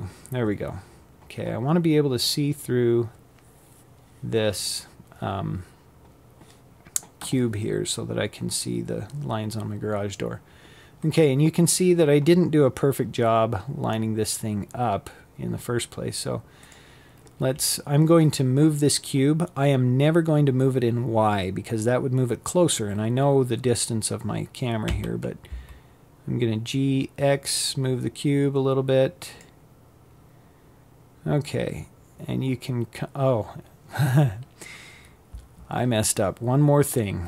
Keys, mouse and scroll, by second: 14.3 click, 22.5 g.